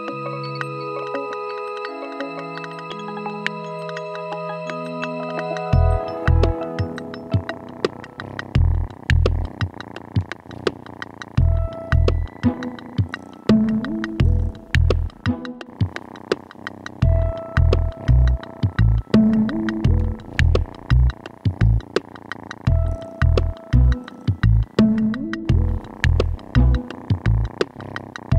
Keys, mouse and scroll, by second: 26.0 click.